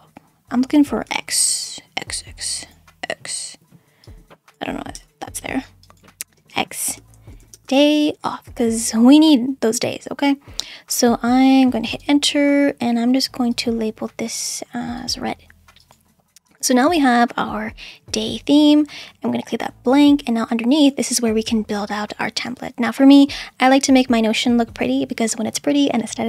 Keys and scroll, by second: 1.1 x, 4.9 BackSpace, 6.4-8.5 typing, 12.0 Return.